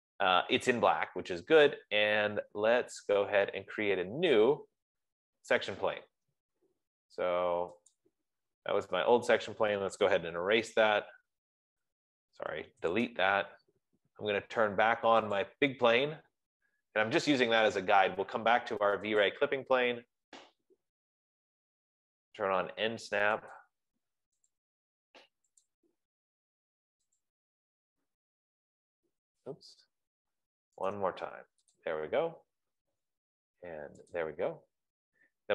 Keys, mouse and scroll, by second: 1.4-3.7 drag, 1.4 typing, 4.9-6.5 middle drag, 4.9-5.5 scroll, 6.4 scroll, 7.7-8.5 scroll, 8.5 click, 10.5-13.1 typing, 13.3 Return, 15.8 click, 16.1 F15, 17.4-22.5 drag, 24.2 click, 27.7 click, 30.4 Escape, 31.4 right click, 32.3 click, 32.7 middle click, 33.2 scroll, 34.5 click.